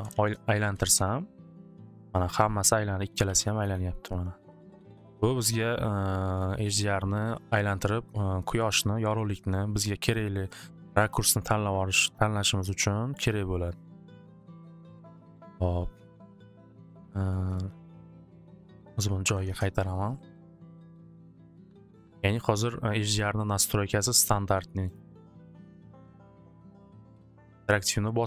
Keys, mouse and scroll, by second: 0.0-0.7 typing, 0.9 Return, 2.3-3.8 typing, 5.4 typing, 6.4 click, 6.8 typing, 9.3-11.4 drag, 13.2 click, 14.2 click, 15.2 click, 17.5 click, 18.5 click, 18.7 click, 19.3-21.8 typing, 20.7 click, 20.8 click, 22.8 click, 24.3 click, 24.9 click, 25.7 click, 27.0 click.